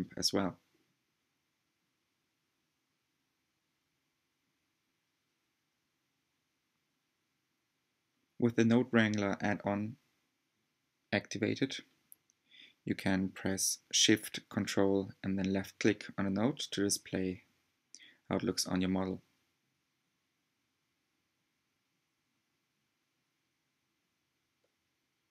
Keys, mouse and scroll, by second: 13.2-25.3 ctrl+shift+drag.